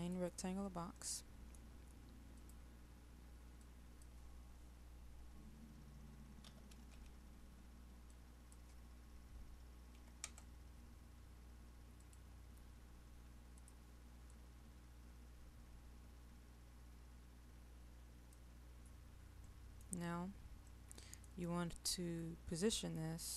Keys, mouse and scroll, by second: 0.0 click, 0.9 middle click, 12.6-18.7 drag, 19.5 middle click, 20.0 scroll down 1, 20.7 middle click.